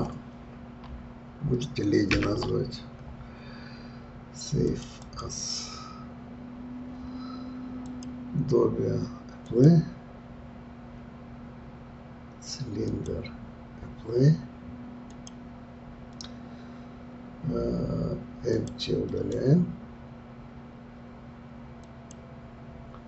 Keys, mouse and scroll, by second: 7.9 click, 9.5 click, 12.9 click, 15.1 click, 18.5 click, 19.1-23.0 right drag.